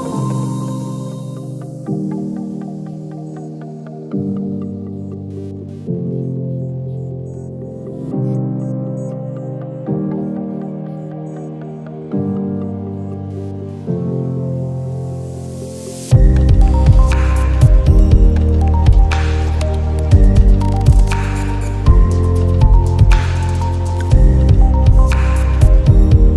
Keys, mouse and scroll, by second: 0.5 click, 1.4 click, 2.4-6.6 drag, 8.1 click, 11.8 click, 13.4 click, 14.0 ctrl+z, 14.3 click, 15.3-17.1 alt+scroll down 2, 17.8 space, 17.8 click, 18.2 space, 18.3 space, 19.2-22.1 drag, 22.1-22.9 alt+scroll up 1, 25.5-25.8 alt+scroll up 1.